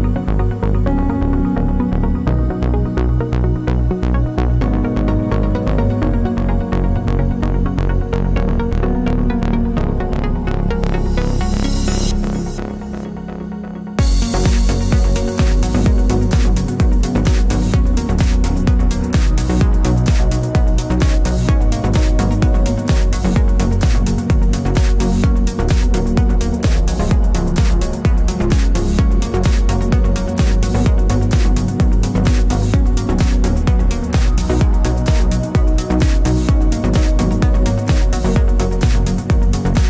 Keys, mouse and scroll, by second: 0.4 alt+middle click, 1.2 alt+d, 1.2 right click, 1.3 click, 1.4 alt+d, 2.0 scroll, 2.1 click, 2.1 right click, 2.1 shift+middle click, 2.4 middle click, 2.7-4.8 drag, 2.7-4.8 right drag, 2.7 shift+middle click, 2.9 scroll up 1, 3.0 alt+d, 3.7 alt+d, 5.1-6.7 middle drag, 5.3 scroll down 1, 6.1 alt+d, 6.7 click, 6.8 shift+middle click, 6.8 scroll up 1, 7.2 alt+d, 7.8 click, 8.0 alt+d, 8.6 click, 8.7-9.9 middle drag, 8.9-9.2 scroll down 2, 9.4 alt+d, 9.9 click, 10.0 alt+d, 10.3 click, 10.4 middle click, 10.6 alt+d, 11.0 click, 11.2-12.3 middle drag, 12.3 alt+d, 12.8 click, 13.3 alt+d, 13.8 click, 13.8 scroll down 2, 14.1-15.1 middle drag, 15.1-15.5 scroll up 2, 15.9 shift+middle click, 16.3 click, 16.4 alt+d, 17.3 click, 17.7 alt+d, 18.7 alt+d, 19.2 click, 20.0 click, 20.1 alt+d, 20.8 click, 20.9-22.3 middle drag, 22.3 click, 22.4 alt+d, 22.9 shift+middle click, 23.8 click, 23.9 alt+d, 24.8 click, 24.9 right click, 24.9 shift+m, 25.8 click, 26.0 alt+d, 26.5 ctrl+z, 27.2 g, 27.4 Escape, 27.7 click, 28.9 alt+d, 30.1 click, 30.3 alt+d, 30.7 click, 31.0 alt+d, 31.5 click, 31.7-32.0 scroll down 2, 32.0-39.8 shift+middle drag.